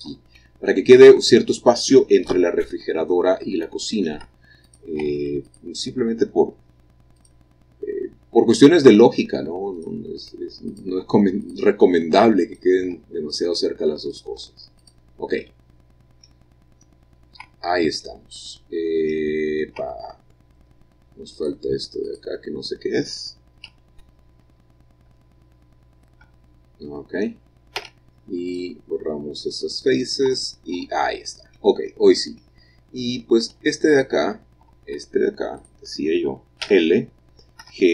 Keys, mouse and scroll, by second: 0.0 click, 1.6 middle click, 2.3-3.1 scroll down 1, 3.1-4.8 middle drag, 4.8 click, 5.6 click, 7.3 click, 8.6 click, 9.0 x, 9.9 click, 10.8 click, 11.1 x, 11.6 click, 12.5 click, 13.0 x, 13.5 click, 14.2 click, 14.5 x, 14.9 click, 15.6-17.2 middle drag, 17.2-19.0 scroll down 1, 17.5 Tab, 19.5-19.9 scroll up 1, 19.6 middle click, 19.9 Tab, 21.5-22.9 drag, 23.8 l, 24.5 l, 25.2 l, 26.3 l, 27.9 x, 28.6-29.6 drag, 30.4 Tab, 30.9 Tab, 32.0-33.7 middle drag, 32.0-33.7 scroll down 1, 33.7 Tab, 34.1 click, 34.8 Tab, 35.7 click, 36.8 l, 37.7 g.